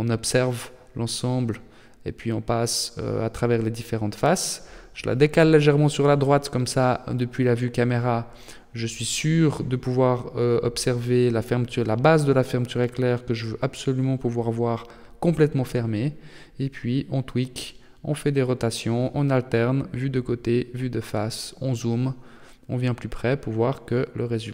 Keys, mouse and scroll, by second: 2.9 Tab, 3.4 middle click, 8.5 KP_0, 10.1 middle click, 11.1 KP_3, 12.0-12.7 scroll up 9, 12.7 shift+middle click, 13.3 Tab, 13.3-14.4 scroll up 2, 14.5 r, 16.7 g, 18.5 middle click, 19.9 Tab, 20.4-21.2 scroll up 4, 21.2 shift+middle click, 21.8 middle click, 23.9-24.5 scroll down 9.